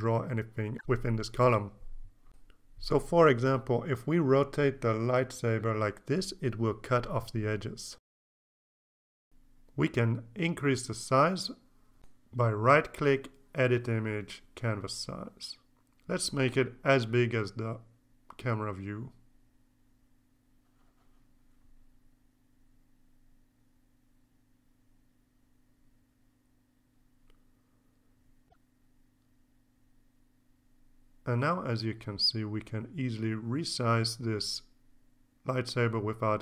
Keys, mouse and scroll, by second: 5.4 click, 7.6 click, 8.9 ctrl+z, 10.7 click, 14.0 click, 15.7 click, 16.1 KP_6, 16.2 KP_4, 16.3 KP_0, 18.7 Tab, 20.1 KP_4, 20.2 KP_8, 20.3 KP_0, 21.3 KP_Enter, 23.6 click, 25.6 click, 26.6-28.1 drag, 32.6 Caps_Lock, 32.8-36.4 drag.